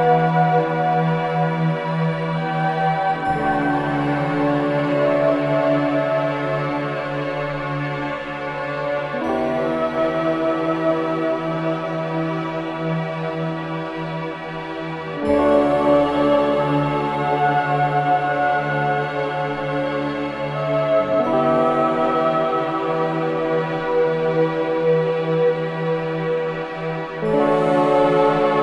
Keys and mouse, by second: 1.2-3.2 drag, 5.1 shift+click, 7.3-13.9 drag, 14.0 i, 14.3 click, 16.7 click, 18.6 shift+d, 19.2 click, 19.9-22.1 typing, 21.8 click, 23.2 click, 23.8 click, 24.0 typing, 25.2 typing, 26.2 ctrl+alt+click, 26.2 typing, 27.5 click, 27.6-28.6 typing.